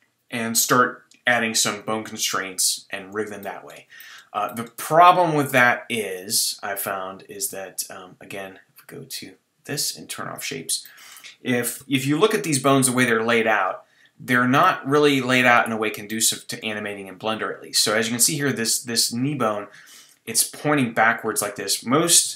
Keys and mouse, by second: 1.7-3.4 drag, 3.4-5.0 middle drag, 5.0 Tab, 9.2-10.9 drag, 10.9 middle click, 11.8 KP_3, 11.9 middle click, 12.7 middle click, 15.5-18.0 middle drag, 18.0 middle click, 18.6 click, 19.2 middle click, 19.5 click, 19.9 middle click, 20.3 middle click, 21.1 middle click, 21.3 click, 22.2 KP_3.